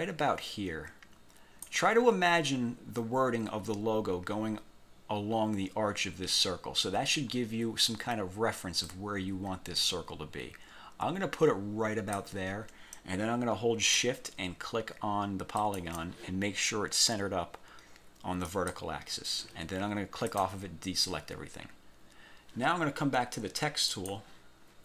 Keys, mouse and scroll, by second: 9.0-12.5 drag, 15.7 shift+click, 18.6 click, 20.4 click, 21.9-22.2 scroll down 1, 24.0 click.